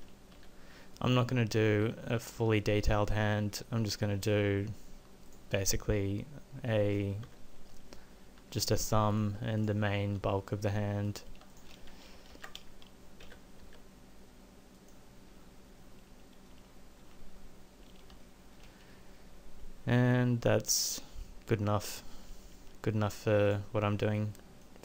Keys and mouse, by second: 0.4 g, 1.9 g, 7.2 KP_7, 8.4 e, 10.0 e, 12.3 ctrl+a, 15.3 middle click.